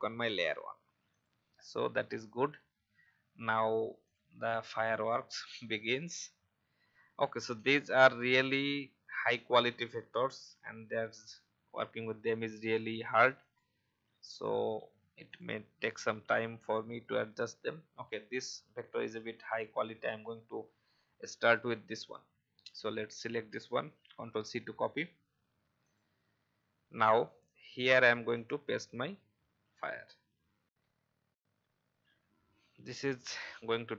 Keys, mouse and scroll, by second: 2.2 alt+scroll up 1, 4.0 click, 9.6-12.2 alt+scroll down 1, 13.4 right click, 14.4 click, 25.8 click, 27.7-28.1 scroll up 1.